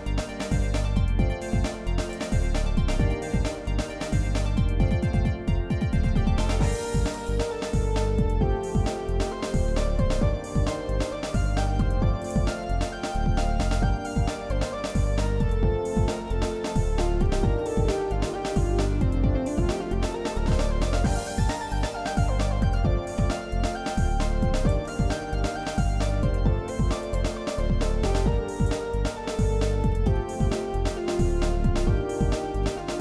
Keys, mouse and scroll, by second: 2.3-3.6 shift+middle drag, 4.2 shift+middle click, 4.8 shift+middle click, 5.7 shift+middle click, 6.5 r, 9.9 g, 12.6 middle click, 13.5 scroll down 1, 14.4-14.9 scroll down 2, 15.2 middle click, 15.9 middle click, 16.5 middle click, 17.0 middle click, 17.6 middle click, 17.9 scroll down 1, 19.0 scroll up 1, 19.5 shift+middle click, 20.8 scroll down 2, 21.5 shift+middle click, 22.2 shift+middle click, 23.1 Tab, 23.7 shift+middle click, 24.6 click, 25.0 shift+middle click, 27.0-29.0 drag, 29.3 shift+middle click, 30.1 middle click, 30.6-32.6 shift+middle drag.